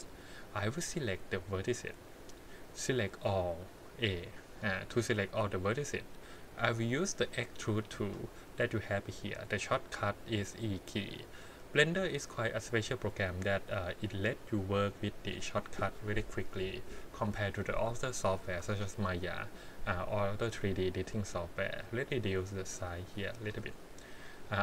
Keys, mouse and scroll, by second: 1.0 click, 2.7-4.5 drag, 7.2 click, 12.5-15.6 scroll down 2, 17.1 KP_1, 18.3 shift+middle click, 18.8 scroll down 1, 22.2-23.5 drag.